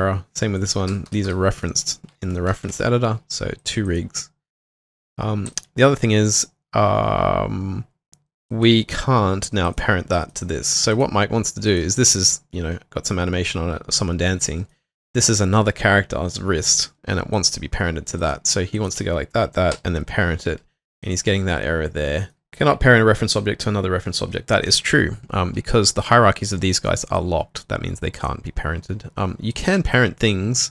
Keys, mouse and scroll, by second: 0.9 Delete, 1.1 Delete, 1.2 Delete, 2.5 ctrl+shift+r, 3.8 double click, 5.8 alt+middle click, 10.1 alt+middle click, 11.3 double click, 11.8 w, 18.8 shift+click, 19.7 p, 21.2 double click.